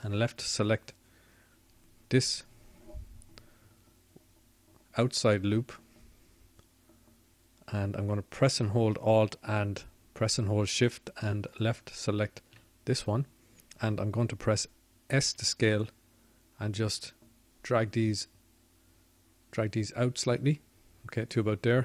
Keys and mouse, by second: 5.0-21.8 drag, 21.4 s.